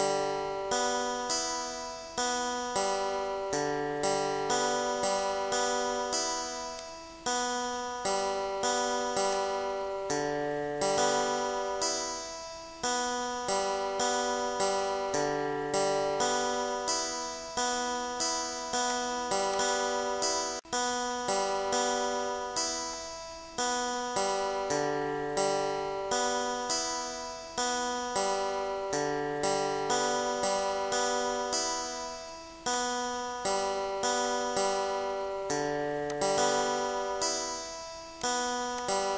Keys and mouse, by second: 1.4 click, 1.9 click, 2.7 shift+click, 3.3 click, 3.9 click, 6.6 ctrl+z, 7.1 click, 8.5 click, 10.3 click, 13.3 click, 15.1 click, 15.9 click, 16.6 click, 17.6 click, 19.2 click, 19.7 click, 20.7 Delete, 21.2 ctrl+z, 21.5 click, 22.0 click, 22.9 click, 23.5 click, 23.8 click, 24.4 click, 26.7 click, 27.2 Delete, 32.3 click, 33.8 click, 35.1 click, 36.4 click, 37.7 click, 38.7 click.